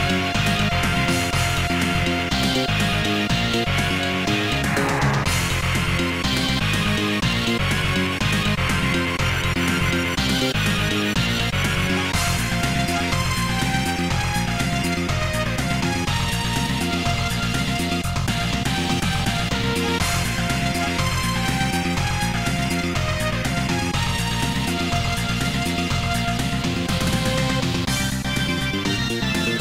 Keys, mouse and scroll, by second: 0.3-2.9 typing, 1.2 Return, 3.8 Return, 5.1 ctrl+z, 5.8-6.6 typing, 10.2 Return, 24.8 click, 25.4 click, 25.8-27.4 typing, 28.0 Return, 28.4 ctrl+z.